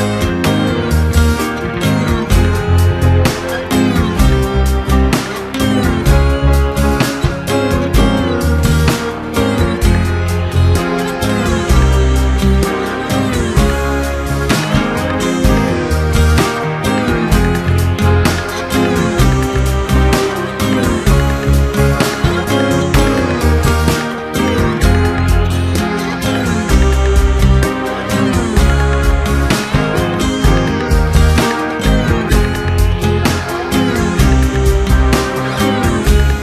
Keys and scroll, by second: 2.9 alt+space, 3.5 alt+i, 3.5-4.4 typing, 6.3 Return, 14.8 ctrl+w, 15.2 Return, 17.0 c, 22.7 Return, 23.7 KP_Add, 24.5 alt+i, 25.1 space, 25.7 shift+F2, 26.0 ctrl+space, 27.1 w, 28.9 Return, 29.6-32.1 typing, 30.6 shift+F2, 31.0 ctrl+d, 33.6 ctrl+d, 35.6 Return, 36.3 shift+F2.